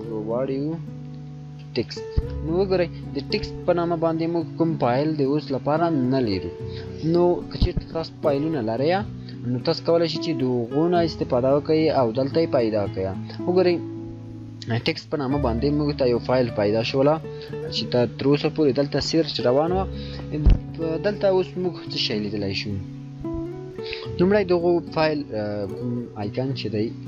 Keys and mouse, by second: 0.0 shift+t, 0.6 shift+e, 1.3 shift+x, 1.6 shift+t.